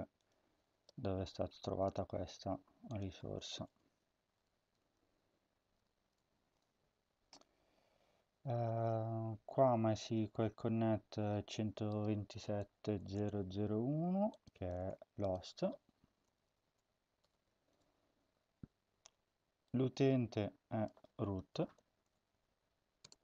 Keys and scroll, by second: 0.6 ctrl+c, 3.6 Return, 4.2 Tab, 4.7-5.7 typing, 6.3 ctrl+v, 12.9 Return, 14.5 BackSpace, 14.7 Return, 16.3-18.1 typing, 21.1-23.2 typing.